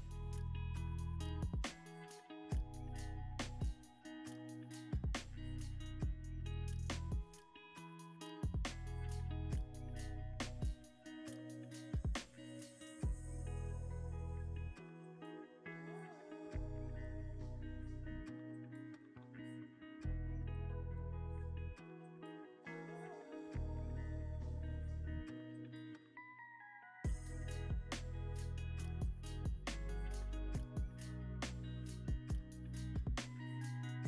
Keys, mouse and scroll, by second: 2.4 i, 2.5-4.6 scroll up 1, 4.9 ctrl+z, 5.3 i, 10.6 i, 11.9 i, 14.2 scroll, 14.2 scroll up 1, 14.3 middle click, 15.4 scroll up 1, 16.8 e, 22.3 typing, 24.2 Escape, 24.7 middle click, 25.2-25.7 scroll down 1, 27.3 e, 29.5 scroll down 1, 32.0 ctrl+v, 32.7 Return, 33.5 middle click.